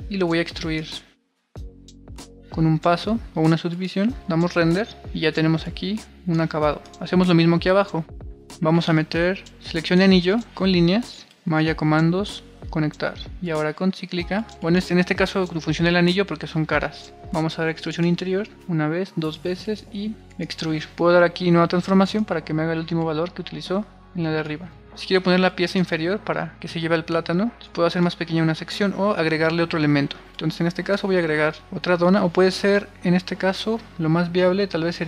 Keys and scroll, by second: 4.2 super+r, 8.1-9.4 typing, 23.0 super+r.